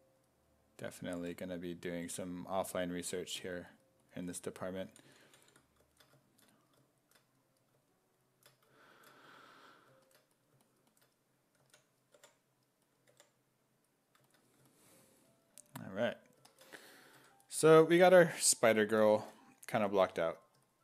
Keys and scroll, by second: 0.8 s, 1.2 4, 5.1 ctrl+z, 11.6 s, 12.2 5, 13.1 5, 17.2 1, 20.1 1.